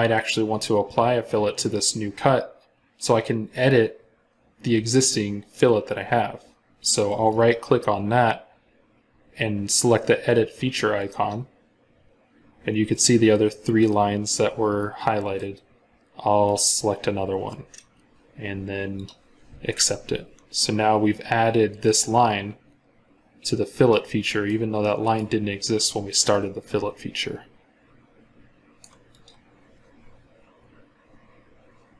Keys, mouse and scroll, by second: 6.9 right click, 12.8 middle click, 23.7 scroll up 1, 23.8 middle click.